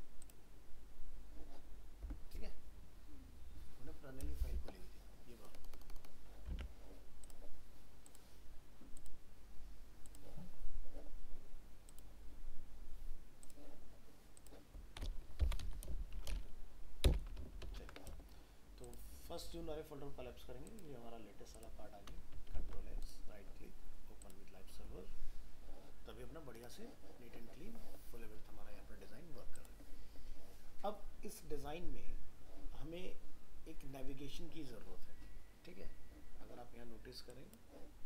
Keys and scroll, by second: 6.5 alt+Tab, 17.4 ctrl+s, 17.6 ctrl+w, 22.5 ctrl+s.